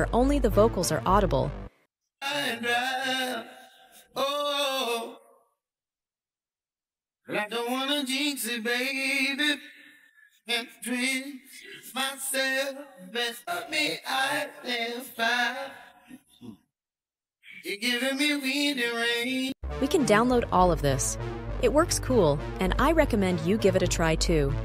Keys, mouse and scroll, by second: 2.1 click, 13.3 click.